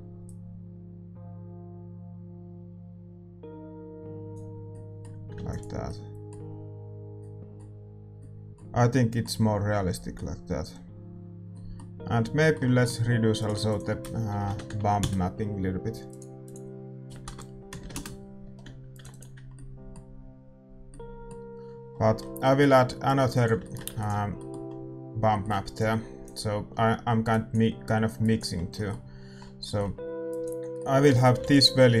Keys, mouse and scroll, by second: 16.1 BackSpace, 18.9-32.0 drag, 20.7 ctrl+s, 20.7-32.0 middle drag.